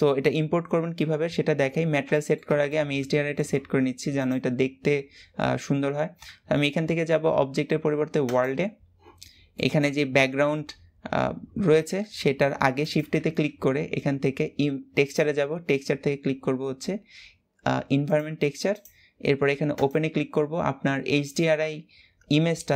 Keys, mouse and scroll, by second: 1.5 scroll down 1, 19.8-22.7 drag.